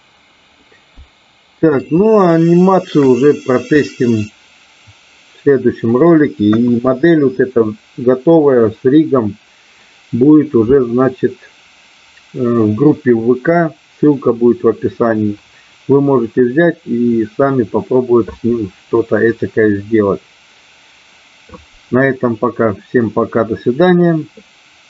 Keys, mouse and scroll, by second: 0.5-1.9 middle drag, 2.0-3.0 shift+middle drag, 3.7-6.0 middle drag, 6.5 KP_1.